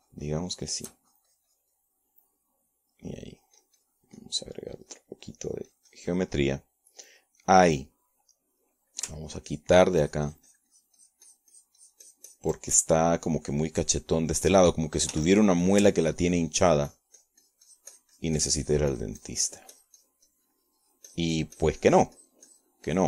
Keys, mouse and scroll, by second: 2.8 shift+click, 4.2 middle click, 5.2-8.2 drag, 8.3-10.0 drag, 10.4 click, 11.0-14.4 ctrl+drag, 14.8 click, 15.8 click, 16.9 f, 17.4-23.0 ctrl+drag.